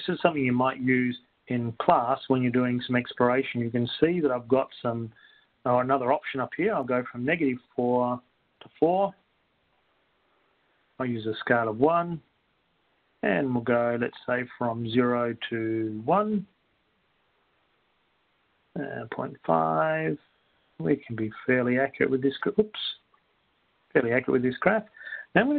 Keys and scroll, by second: 7.7-8.5 typing, 9.5 Down, 10.0 4, 11.0 Down, 12.5 1, 13.5 Down, 13.5 Return, 16.8 0, 17.0 Down, 17.2 1, 18.0 Down, 19.2 ., 19.5 2, 20.5 Down, 21.3-22.5 typing, 23.5 Left, 23.5 Delete, 25.3-25.5 typing.